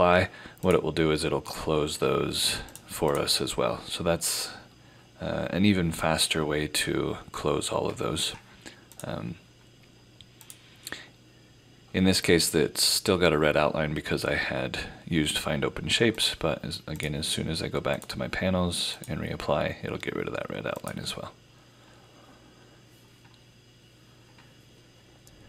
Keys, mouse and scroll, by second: 9.0 click, 16.2 click.